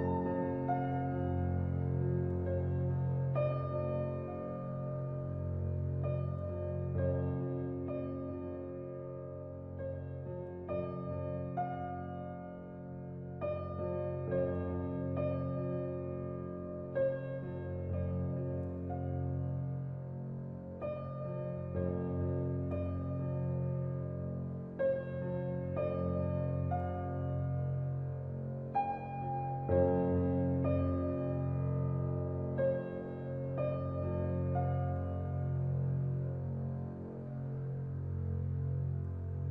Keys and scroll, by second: 22.2 ctrl+t, 39.2 typing.